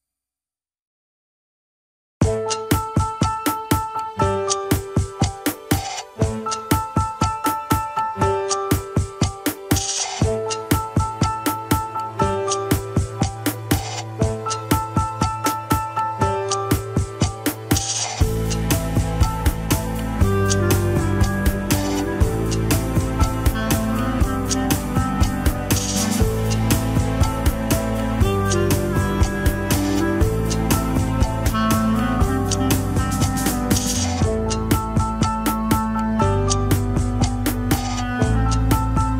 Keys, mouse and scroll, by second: 0.0 alt+z, 1.3 ctrl+click, 1.4 alt+z, 2.1 alt+z, 3.7 ctrl+click, 3.7 alt+z, 4.1 click, 4.5-4.9 scroll down 1, 4.9 click, 5.8-6.8 middle drag, 6.8-7.9 scroll up 2, 7.0 KP_1, 7.9 click, 8.3 middle click, 8.9 click, 9.6 middle click, 10.1 scroll down 1, 10.4 alt+z, 11.8 ctrl+click, 11.8 alt+z, 12.0-13.7 middle drag, 13.7 click, 14.0 middle click, 14.6 click, 15.2 middle click, 15.5 KP_1, 15.7 scroll down 3, 15.9 ctrl+Tab, 16.6 ctrl+s, 16.7 click, 17.1-17.6 scroll down 2, 17.6-18.1 scroll up 2, 18.1 scroll down 2, 19.0 ctrl+Tab, 19.6 click, 20.1 alt+z, 20.5 g, 22.9 a, 23.2 alt+r, 23.6 alt+g, 23.9 scroll up 1, 24.4 ctrl+Tab, 25.6 ctrl+Tab, 26.0 Left, 26.2 alt+z, 26.4-26.8 scroll up 2, 26.8 alt+z, 27.4 r, 34.2 scroll down 1, 34.4 KP_3, 34.6-35.0 scroll up 2, 35.0 r, 38.1 scroll down 2.